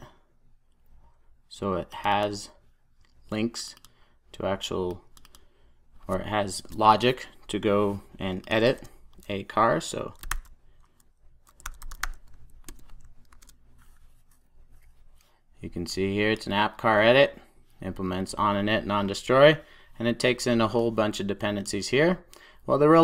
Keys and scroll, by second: 8.7 super+a, 12.6 Return, 15.7 super+s.